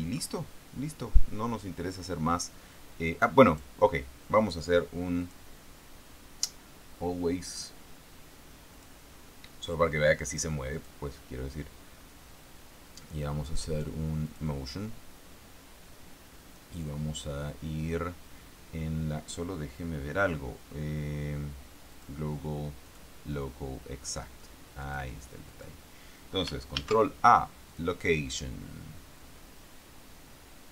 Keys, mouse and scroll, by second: 3.8 right click, 5.5 click, 9.1 click, 11.1 click, 14.6 click, 22.3 click, 23.2 click, 25.2 click, 25.8 click, 27.1 ctrl+a, 28.1 click.